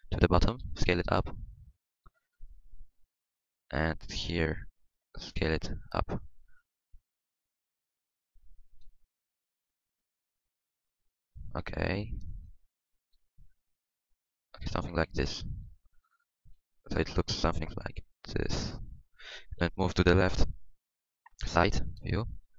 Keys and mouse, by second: 0.6 s, 2.8 g, 5.0 e, 6.6 z, 7.0 s, 9.0 r, 9.5 r, 10.2 s, 12.4 click, 14.6 click, 14.6 r, 15.6 s, 16.0 Tab, 16.3 Tab, 16.5 z, 19.6 KP_3, 20.9-22.5 drag, 22.4 Tab.